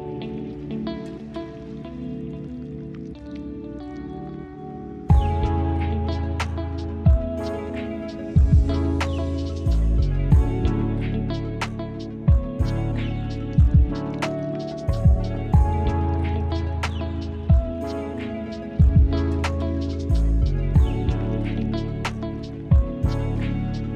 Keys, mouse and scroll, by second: 0.2 `, 0.6 click, 1.2 `, 1.5-1.8 middle drag, 1.8 scroll down 1, 2.0 click, 2.2 `, 2.8 middle click, 3.0 `, 7.2 click, 7.6 click, 8.6 r, 9.3 click, 9.9 click, 10.4 click, 10.4 middle click, 10.9 click, 11.0 x, 11.2-11.9 middle drag, 11.9 click, 12.4 click, 12.4 middle drag, 12.7 click, 13.1 click, 13.3 `, 13.6 click, 14.0 middle click, 14.2 s, 14.6 middle click, 14.7-15.0 scroll up 4, 14.8 middle drag, 15.0 middle drag, 15.2 scroll down 1, 15.2 middle drag, 15.3 click, 15.5 shift+a, 16.2 click, 16.5 n, 16.8 click, 17.0 click, 17.1-17.5 scroll down 12, 17.9 g, 18.1 scroll up 2, 18.2 g, 18.5-19.2 middle drag, 20.0 click, 20.1 drag, 20.2 click, 20.4 drag, 20.5 g, 20.7 click, 21.1 click, 21.7-22.2 drag, 23.2-23.6 scroll up 2, 23.6 n.